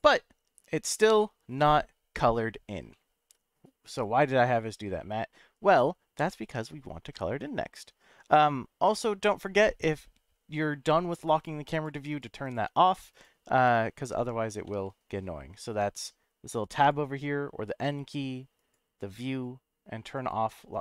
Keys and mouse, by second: 2.9-4.0 middle drag, 11.3 click, 11.7 click, 12.1 click, 12.4 click, 12.7 click, 13.1 click, 14.6 n, 16.8 click, 18.6 click.